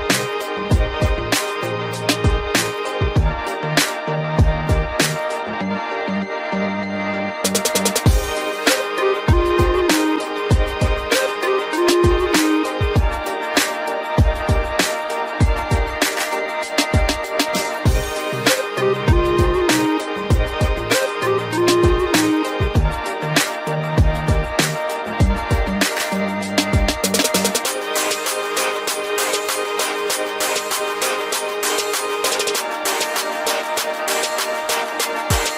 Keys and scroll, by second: 23.1 ctrl+i.